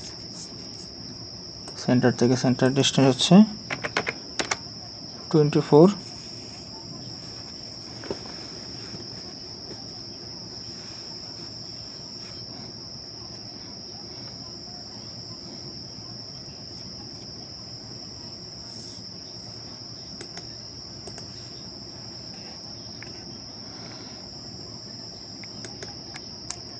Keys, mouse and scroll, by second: 3.7 typing, 4.4 Return, 14.9 right click, 16.6 right click, 17.7 ctrl+click, 19.6-20.6 scroll up 1, 21.4 right click, 22.7 right click, 24.7 ctrl+click.